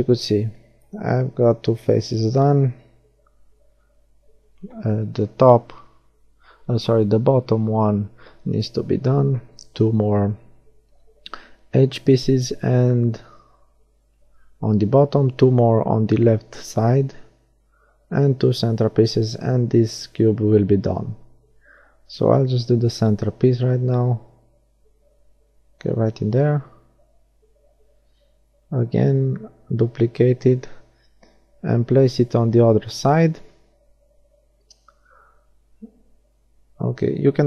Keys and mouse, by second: 1.5 shift+c, 3.7 middle click, 9.0-10.6 middle drag, 12.1-14.3 right drag, 13.6 shift+d, 14.4 right click, 15.1 click, 15.9 r, 19.1-21.2 drag, 22.0-24.0 drag, 24.0 middle click, 24.7 middle click, 26.6 middle click, 28.9 shift+d, 29.3 middle click, 31.3 ., 33.6 s.